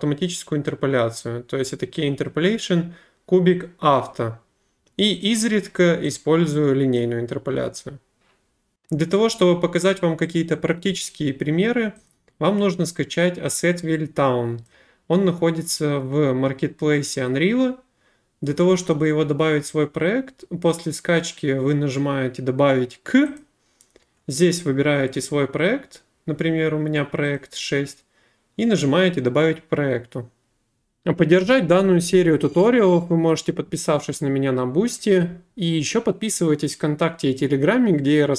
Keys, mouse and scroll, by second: 5.3 click, 7.0 click, 12.1 click, 14.6 click, 15.7 click, 23.4 click, 27.3 click, 30.9 click.